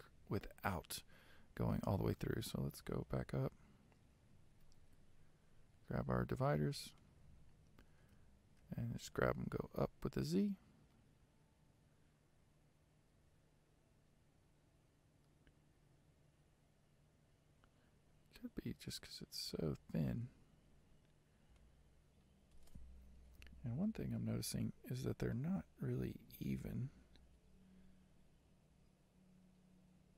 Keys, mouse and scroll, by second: 2.6 g, 6.5 click, 8.3 g, 20.8-21.3 scroll up 5, 21.7 middle click, 23.1 KP_3, 25.3 z, 26.5-29.5 shift+middle drag.